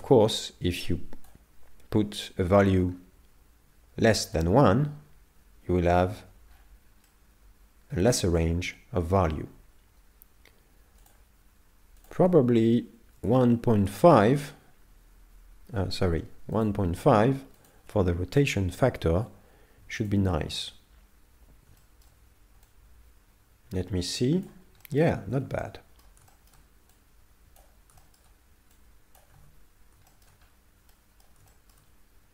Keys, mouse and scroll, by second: 6.6-7.3 scroll up 6, 7.1 middle click, 11.0 click, 16.6 click, 21.8 shift+middle click, 22.7 click, 24.8 shift+middle click, 25.4 z, 25.6 middle click, 26.3 shift+middle click, 27.0 click, 28.0 shift+middle click, 28.8 click, 29.4 alt+a, 30.1 shift+middle click, 30.5 scroll up 3, 30.9 middle click, 31.5 shift+middle click.